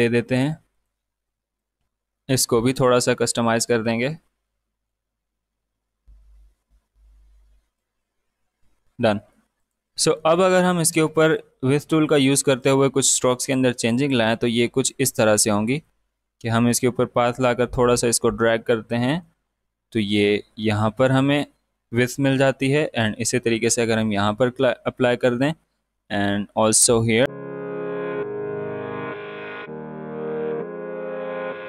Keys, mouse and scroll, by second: 5.6 ctrl+z, 6.0-21.7 drag, 21.7-25.3 drag, 25.3-27.9 drag, 28.0-29.9 drag, 30.3 click, 31.6 click.